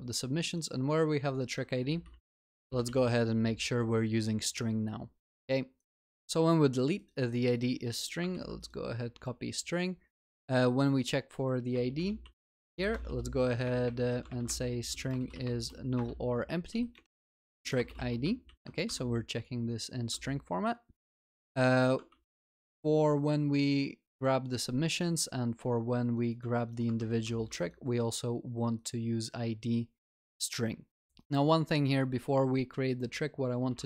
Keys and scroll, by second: 3.0 ctrl+s, 8.7 ctrl+c, 11.7 ctrl+BackSpace, 18.4 Return, 18.5 ctrl+s, 22.3 ctrl+v, 22.3 ctrl+s, 27.2 ctrl+s.